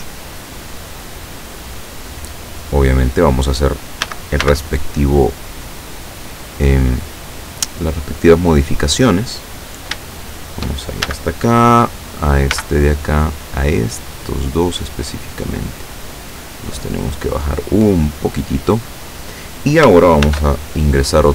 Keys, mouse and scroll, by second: 0.6 click, 4.1 a, 4.5 b, 4.9-6.3 drag, 6.7-9.7 drag, 9.7-10.0 scroll up 2, 10.1 shift+middle click, 11.1 shift+a, 12.6 b, 12.7-14.5 drag, 15.1-17.1 drag, 17.7-18.9 drag, 20.3 ctrl+r.